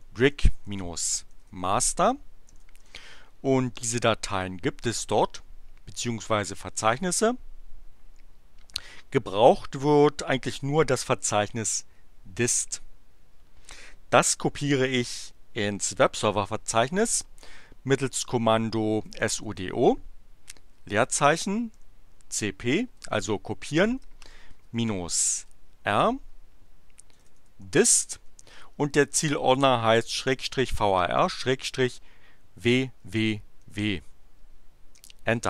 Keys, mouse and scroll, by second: 0.0-3.1 typing, 11.7 click, 16.9 click, 18.8-25.3 typing, 26.7-28.1 typing, 29.8-31.6 typing, 32.6 w, 34.9 Return.